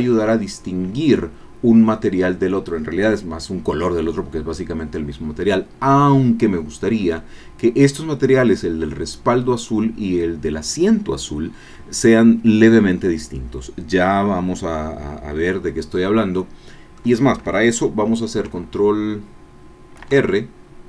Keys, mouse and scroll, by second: 15.9-17.1 drag, 20.0 ctrl+r.